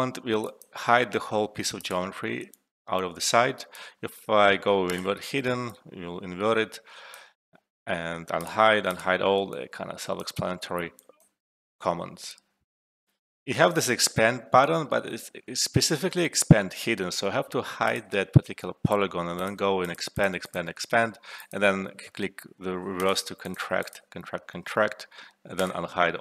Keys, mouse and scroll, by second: 0.1 alt+middle click, 0.4 alt+click, 1.7 click, 2.5-3.8 alt+drag, 5.6-7.2 alt+drag, 9.5-10.4 alt+click, 10.5 alt+middle click, 11.0 alt+click, 12.0 alt+middle click, 17.8 click.